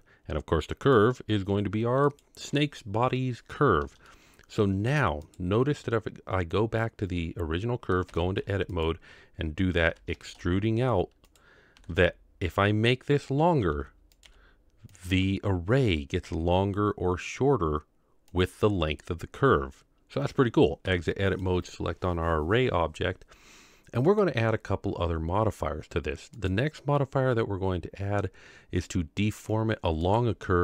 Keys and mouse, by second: 0.8 click, 4.0-4.9 shift+middle drag, 5.3 click, 8.1 Tab, 8.7 click, 9.9 e, 11.8 r, 13.6 s, 14.3 g, 16.2 g, 20.8 Tab, 21.2 click, 24.1 click, 26.5-30.1 drag.